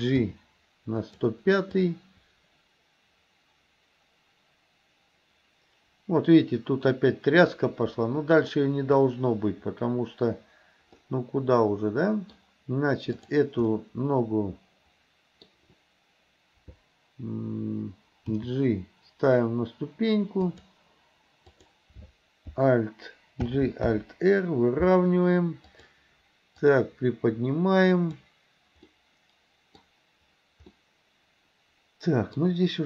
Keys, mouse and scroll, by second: 0.4 g, 1.9-9.1 drag, 11.1-12.4 middle drag, 13.2 click, 13.8-15.5 middle drag, 18.4 g, 21.5 click, 23.5 alt+g, 23.9 alt+r, 25.8 click, 26.8-28.3 drag, 28.9 middle click, 29.8 scroll down 2, 30.8-32.4 middle drag, 32.4 scroll down 2.